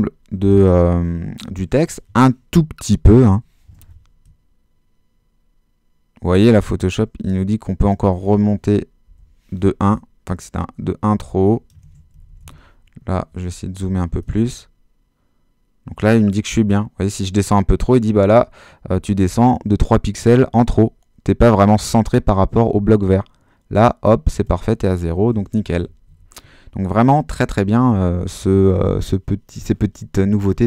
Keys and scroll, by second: 3.0 Down, 9.1 shift+Down, 9.6 shift+Down, 25.3 shift+super+-.